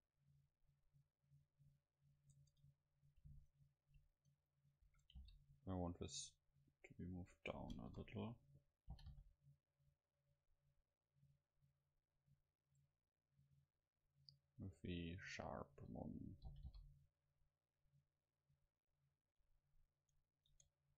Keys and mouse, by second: 1.9 middle click, 2.4 Tab, 3.4-5.2 right drag, 4.9 a, 5.2 c, 7.5-9.3 drag, 7.8 KP_0, 9.0 g, 14.1-16.5 drag, 16.5 g, 20.5-20.9 drag, 20.6 Tab.